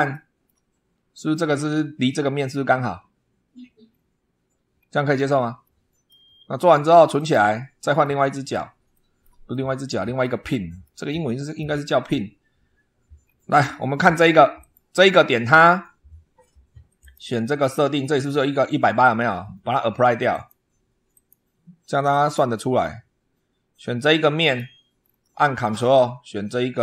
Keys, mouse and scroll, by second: 0.0-0.5 shift+middle drag, 0.6 shift+scroll up 1, 3.7-4.8 scroll down 4, 5.5-6.1 shift+middle drag, 7.0 click, 7.9 middle click, 8.8 shift+middle click, 9.4 shift+middle click, 10.4 shift+middle click, 11.0 shift+middle click, 11.6 scroll up 1, 13.0 scroll down 1, 14.4 click, 16.8 click, 17.3 click, 20.2 click, 21.0 click, 22.0 click, 22.7 scroll up 1, 24.3 click, 24.8 scroll down 1, 26.7 ctrl+click.